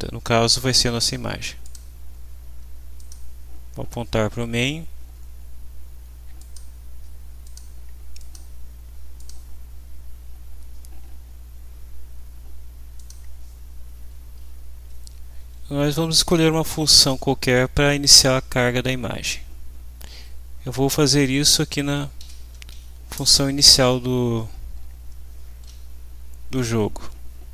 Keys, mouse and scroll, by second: 1.6 click, 3.0 click, 6.4 click, 7.4 click, 8.2 click, 9.2 click, 13.0 click, 15.4 Home, 20.4 shift+Up, 20.8 Down, 21.7 shift+Down, 22.2 shift+End, 22.7 shift+Delete, 23.2 shift+Return.